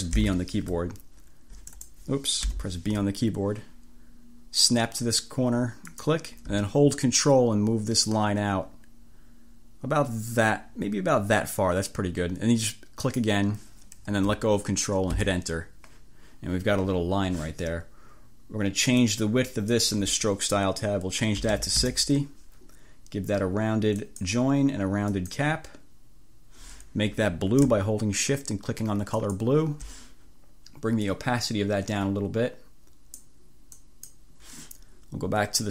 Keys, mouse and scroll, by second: 0.2 b, 1.9 click, 2.5 b, 5.9 click, 13.0 click, 15.2 Return, 19.1 click, 21.2-22.1 typing, 24.2 click, 25.2 click, 29.2 click, 31.2-33.5 drag, 33.8 click.